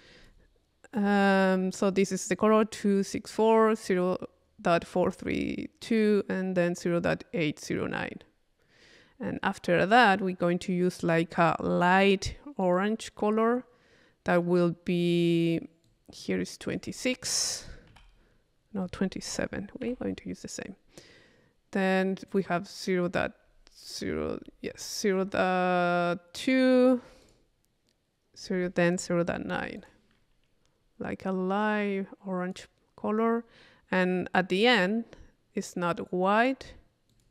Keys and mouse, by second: 9.8 click, 15.9-16.9 drag, 17.1 click, 22.3 click, 27.3 click, 28.4-29.9 drag, 31.6-33.0 drag, 37.1 click.